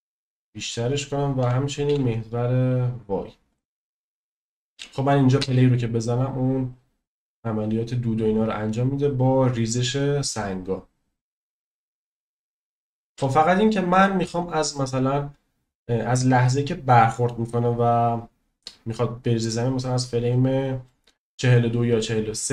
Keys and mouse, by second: 0.1-0.7 middle drag, 1.4 s, 1.9 y, 5.4 space, 7.2-8.8 middle drag, 13.2 space, 14.2-21.2 drag.